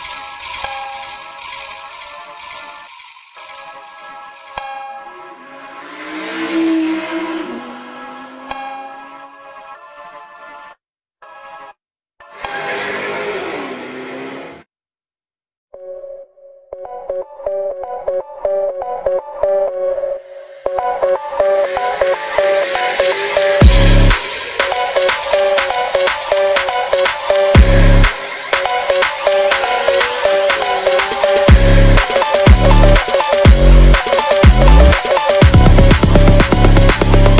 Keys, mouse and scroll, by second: 0.6 click, 2.9 click, 3.2 s, 4.1 click, 4.3-4.8 scroll up 2, 4.8 shift+a, 5.8 click, 6.1 g, 6.6 g, 7.6 click, 8.0 0, 8.5 click, 9.1 click, 10.6 click, 12.0 scroll down 3, 12.2 click, 12.5-12.9 drag, 13.5 click, 13.6 scroll up 3, 13.8 click, 14.3 Delete, 14.7 ctrl+z, 15.0 click, 15.2 click, 15.8 g, 16.8 scroll down 3, 16.9 click, 17.1 Tab, 17.7 ctrl+s, 19.4-20.0 scroll down 4, 20.0 scroll down 1, 20.3 click, 20.3 scroll up 3, 20.6 click, 21.4-22.4 drag, 23.2 click, 23.4 scroll up 3, 23.6 shift+a, 24.5 r, 25.5 click, 26.3 click, 26.6 ctrl+z, 26.9 g, 28.0 g, 28.6 click, 29.0 s, 29.9 click, 30.7 click, 31.4 0, 32.0 click, 33.3 ctrl+s, 34.8 click, 35.3-35.7 drag, 36.6 click.